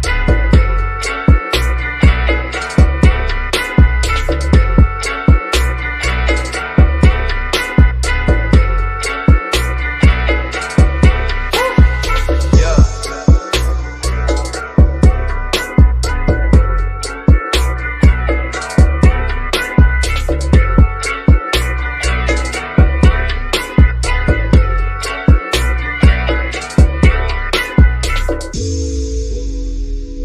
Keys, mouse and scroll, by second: 1.0 shift+click, 1.9 shift+Delete, 3.5-4.1 shift+scroll down 1, 4.1 shift+middle click, 4.9 scroll up 1, 8.0-8.5 scroll up 1, 8.5 click, 9.5 shift+click, 15.9 Delete, 19.3 shift+click, 20.5 Delete, 22.3-22.8 scroll down 1, 23.2-25.3 shift+middle drag, 25.3 scroll up 1, 27.1 click, 29.7 click.